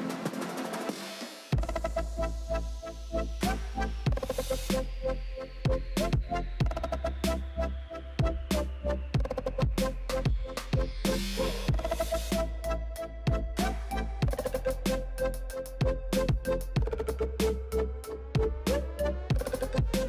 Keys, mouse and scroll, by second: 0.2 alt+shift+click, 2.5 shift+d, 4.7 alt+z, 4.9 c, 6.4 g, 7.2 alt+z, 7.4 click, 7.4 middle click, 8.2 ctrl+l, 8.7 s, 9.9 shift+middle click, 10.2-11.1 scroll up 1, 11.1 s, 13.8 g, 15.2-17.2 shift+middle drag, 17.2 click, 17.5 click, 18.2 click, 18.5-19.2 scroll down 3, 19.2 scroll up 2.